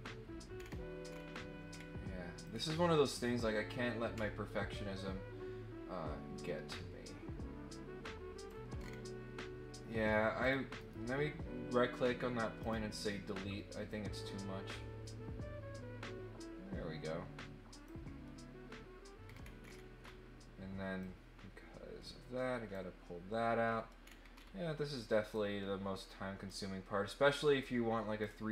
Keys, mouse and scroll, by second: 0.6 scroll down 2, 1.0 scroll up 2, 1.6 scroll up 2, 2.4-8.4 drag, 8.7 middle click, 8.7 scroll down 1, 10.4 click, 10.8 right click, 12.6 click, 13.8-17.8 drag, 19.2 scroll down 1, 19.6-20.1 scroll up 4, 21.0-22.7 drag, 23.6-24.2 scroll down 6, 24.3 scroll up 2, 25.3-26.4 drag, 28.2-28.5 drag.